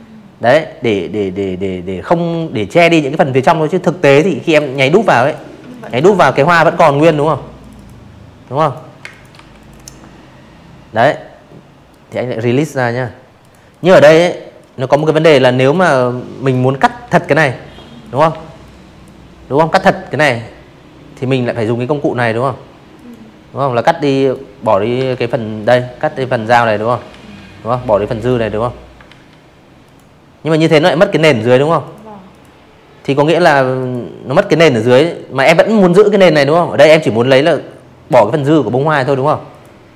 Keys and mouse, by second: 1.3 click, 1.5 click, 2.1 click, 2.7 click, 2.8 click, 3.4-3.7 drag, 4.0 ctrl+z, 4.5 click, 4.7 click, 5.1 v, 5.6 click, 5.9 space, 6.1 click, 6.3 v, 6.5 click, 8.8 right click, 9.0 right click, 10.3 click, 10.6 click, 11.5 click, 12.0 Delete, 12.5 click, 12.9-13.4 drag, 13.8 ctrl+z, 14.9 drag, 15.6-16.0 drag, 19.9 click, 21.1 click, 22.0 ctrl+z, 22.5 click, 24.0 ctrl+z, 25.1 click, 26.0 ctrl+z, 26.8 click, 28.3 ctrl+z, 28.8 click, 29.2 click, 30.3 click, 30.7 click, 33.7 drag, 36.5 click, 39.3 click, 39.7 click.